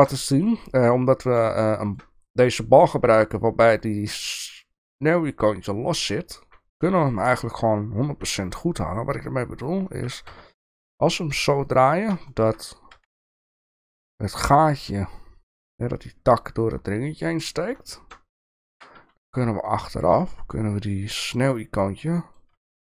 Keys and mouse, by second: 1.7 shift+middle drag, 7.1 shift+middle click, 10.0 r, 12.3 shift+middle click, 12.9 g, 16.7 middle click, 17.8-18.2 shift+middle drag, 18.7 g, 20.2-22.4 middle drag, 22.6-22.8 shift+middle drag.